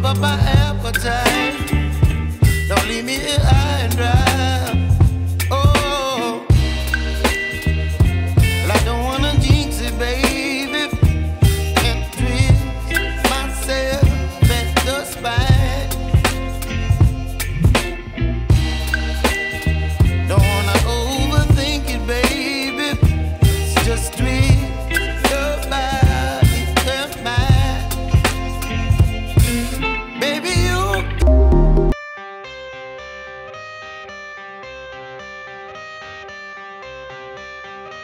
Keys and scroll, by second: 1.1 s.